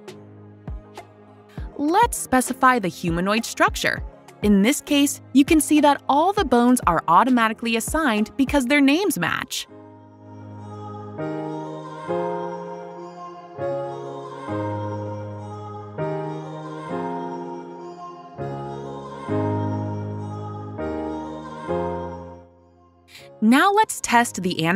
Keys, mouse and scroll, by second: 0.7 click, 3.7 click, 4.8 click, 8.9 click, 16.8 click, 20.5 click, 21.9 click, 22.4 click, 22.7 click.